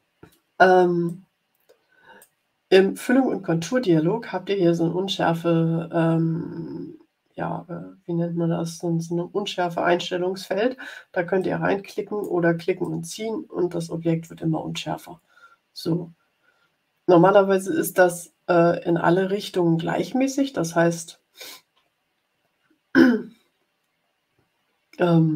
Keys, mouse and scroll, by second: 1.0-2.3 drag, 11.3-12.4 drag, 12.8-25.3 drag.